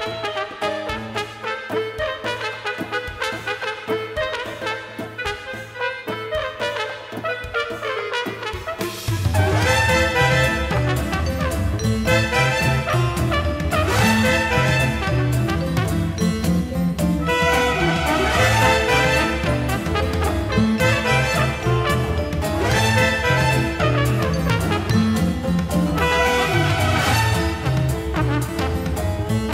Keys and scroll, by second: 0.8-2.4 typing, 3.1-3.5 scroll.